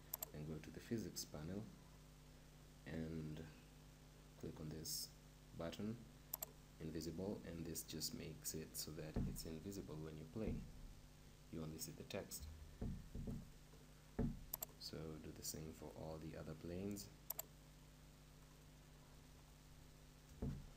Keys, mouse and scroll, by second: 6.4-8.3 drag, 9.7 p, 12.4 p, 13.4-17.7 right drag, 14.6-16.5 drag, 17.3-19.1 drag, 19.3 middle click.